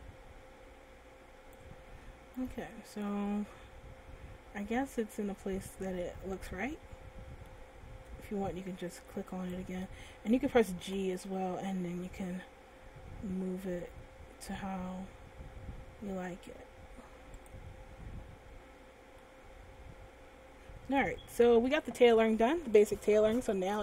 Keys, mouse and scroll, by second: 2.6 Tab, 3.2-3.5 scroll down 1, 3.5 middle click, 9.2 Tab, 10.1 right click, 11.5 g, 18.0 click, 18.8 Tab, 19.4 middle click.